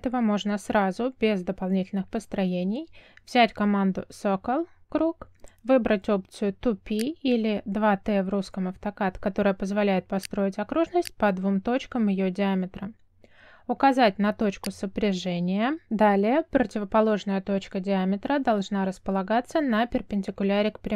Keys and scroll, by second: 4.8 c, 5.7 space.